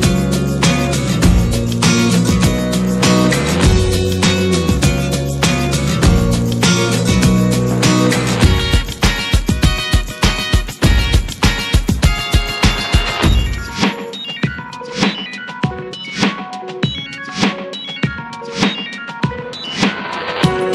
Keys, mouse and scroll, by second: 0.6 scroll down 1, 0.8-2.3 middle drag, 2.3 n, 7.2 n, 11.3-15.1 drag, 15.1 middle click, 15.2-15.5 scroll up 8, 15.8 `, 16.2 middle click, 16.8-17.2 middle drag, 17.2 `, 17.6-18.3 middle drag, 18.3 `, 18.6-19.3 middle drag, 19.4 middle click, 19.6 scroll down 9, 19.9 scroll up 1, 20.0-20.7 shift+middle drag.